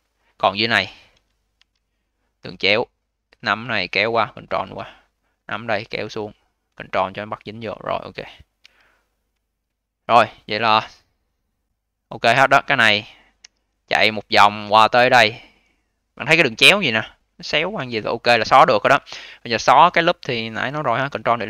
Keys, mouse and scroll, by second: 0.5-1.5 scroll up 8, 1.5 1, 1.7-2.4 scroll up 3, 2.4 click, 3.3 click, 4.9 click, 5.5 click, 8.5 2, 9.0 click, 9.2 click, 9.6-13.3 scroll down 9, 13.3 d, 13.6 scroll down 2, 13.9 alt+click, 14.6 d, 14.8-18.4 scroll up 11, 21.3 ctrl+Delete.